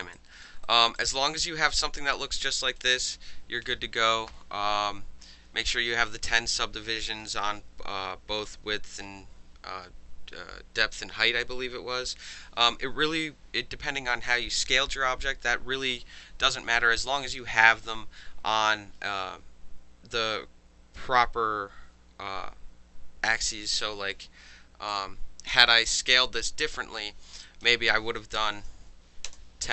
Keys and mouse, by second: 0.1 alt+click, 0.6 alt+right drag, 1.0 alt+click, 1.8 alt+click, 2.5 alt+click, 24.9 click, 27.4 click, 28.5 KP_1, 28.5 KP_0, 29.3 KP_Enter.